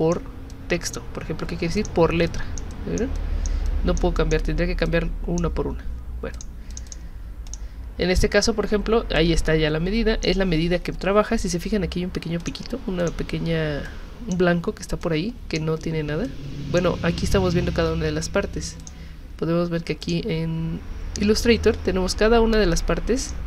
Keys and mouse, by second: 0.5 click, 1.8 click, 2.3 click, 2.7 click, 3.2 click, 3.7 click, 4.2 click, 4.9 click, 6.3 click, 6.7 click, 6.9 click, 7.5 click, 9.2-10.2 drag, 12.4 click, 13.0 click, 13.9 click, 15.0 click, 16.2 click, 18.8 click, 20.0 click, 23.2 click.